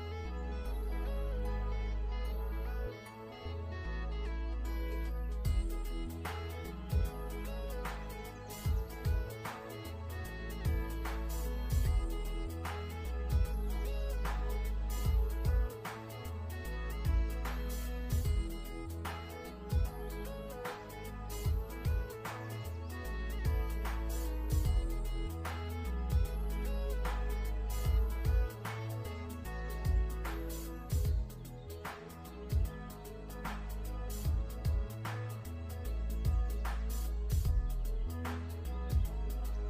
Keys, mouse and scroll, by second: 0.8 v, 2.8 x, 3.0 click, 6.9 alt+shift+scroll down 2, 7.4-8.2 ctrl+scroll up 4, 8.2 click, 9.2 alt+shift+scroll down 2, 9.4 scroll up 1, 9.6-10.3 ctrl+scroll down 2, 10.6-11.1 alt+scroll up 2, 11.1 click, 12.1 ctrl+scroll up 1, 14.0 scroll up 1, 18.4 click, 19.9 shift+click, 21.0 alt+shift+scroll up 2, 21.6 alt+shift+click, 22.5-23.1 alt+shift+scroll down 2, 23.6 shift+click, 26.8 i, 26.9 click, 27.3 v, 27.5 click, 27.7-28.2 alt+shift+scroll down 3, 28.7-30.0 scroll up 1, 34.9 click, 36.7 click, 38.9 ctrl+scroll up 1.